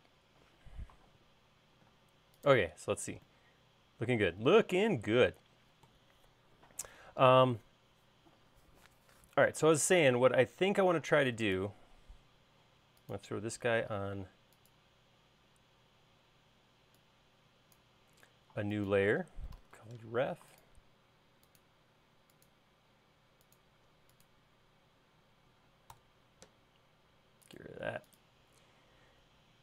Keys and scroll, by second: 1.6 space, 2.7 space, 20.0-21.0 typing, 26.7 Return.